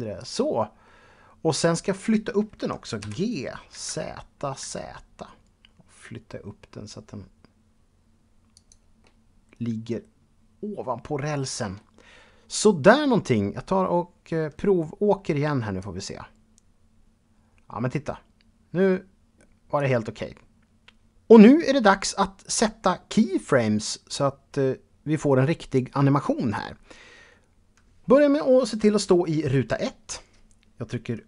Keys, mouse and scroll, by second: 0.4 middle click, 2.6 g, 3.3 z, 4.2 z, 8.1 click, 8.6-11.4 middle drag, 12.4-13.9 scroll down 1, 14.2-15.4 scroll down 1, 15.4-19.4 drag.